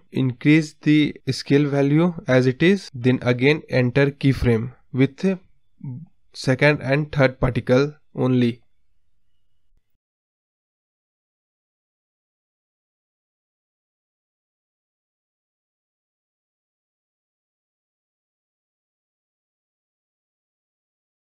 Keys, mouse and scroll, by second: 0.2-1.9 drag, 1.9-3.8 right drag, 3.8 click, 5.2-5.7 scroll down 2, 5.7-6.4 scroll up 6, 7.7-14.4 drag, 8.6-9.1 Left, 9.2 Left, 9.3 Left, 10.5 Left, 10.7 Left, 11.4 Left, 14.4 Left, 16.2 click, 16.7 right click, 17.1 Right, 18.2 click, 19.2 right click, 19.7-20.1 drag, 20.1 space, 20.2-20.9 scroll up 6, 20.9-21.3 scroll down 9.